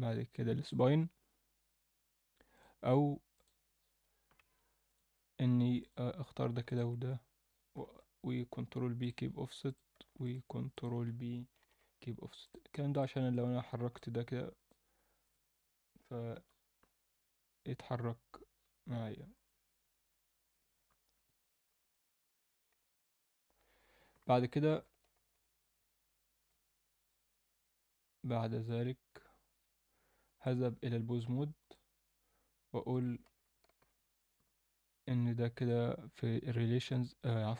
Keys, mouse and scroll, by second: 2.5 click, 3.3-4.5 drag, 4.8 click, 5.8 click, 6.7 shift+click, 7.7 ctrl+p, 9.6 click, 10.2 shift+click, 10.7 shift+click, 11.6 ctrl+p, 12.9 click, 13.3 alt+middle click, 14.5-15.3 drag, 16.3 g, 19.3-20.0 drag, 20.4-20.7 alt+middle drag, 20.9 Tab, 21.1 click, 21.8 shift+click, 22.7 ctrl+p, 24.8 alt+middle click, 25.2 shift+middle click, 25.7 middle click, 27.5 click, 28.6 alt+middle click, 30.3-31.7 drag, 32.9 click, 33.2 a, 33.8 alt+r, 34.0 alt+g, 34.9 click, 35.5 click, 36.9 click.